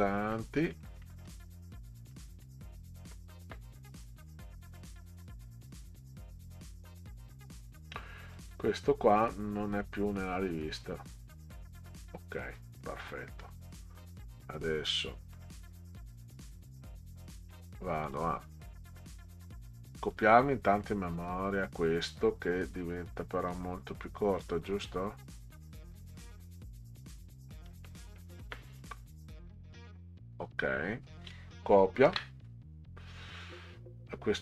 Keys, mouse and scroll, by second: 0.3 middle click, 1.0 middle click, 2.1 middle click, 4.0 scroll up 2, 4.8 click, 6.2 scroll down 2, 6.8 scroll down 2, 8.2 click, 8.5 click, 9.6 scroll down 6, 16.5 click, 18.0 click, 20.0 click, 23.5-25.9 drag, 26.3-26.6 scroll down 2, 27.7-29.3 drag, 32.1 ctrl+c.